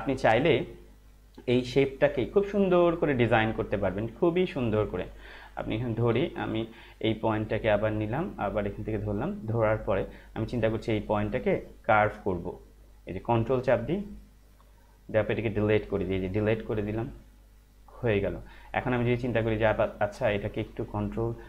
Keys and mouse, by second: 1.0 click, 5.6 click, 6.2 ctrl+z, 7.6 click, 13.4 ctrl+click, 16.3 alt+click.